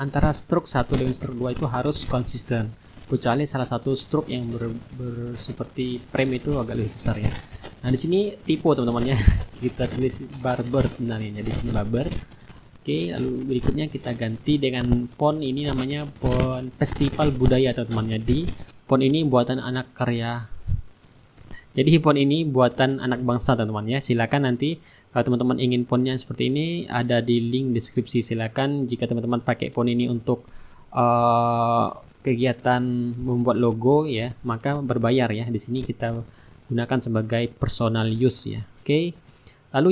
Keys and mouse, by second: 0.8 click, 2.3-5.5 typing, 6.6 ctrl+a, 7.7 click, 10.9-12.1 typing, 13.5 click, 15.5 click, 16.8-21.5 ctrl+drag, 22.4 click, 24.1 shift+click, 25.3-33.0 drag, 29.1-33.0 shift+right drag, 33.2 click, 34.7 click, 36.7 click, 38.3 click.